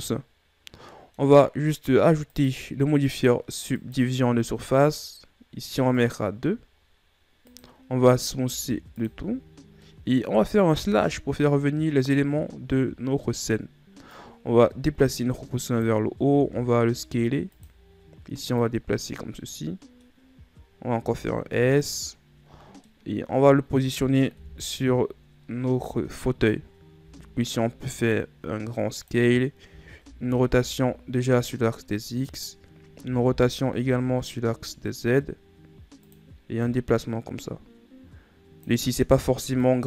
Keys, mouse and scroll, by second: 0.5-2.9 middle drag, 2.9 click, 6.6 click, 9.0 w, 10.4-11.7 middle drag, 11.7 KP_Divide, 14.7 click, 17.0 s, 19.2 click, 20.0-21.0 middle drag, 21.0-21.5 scroll up 1, 21.6 s, 23.5-25.0 middle drag, 25.0 KP_1, 26.1-26.9 shift+scroll up 2, 27.6 s, 30.3 r, 33.6 r, 37.2-39.8 drag.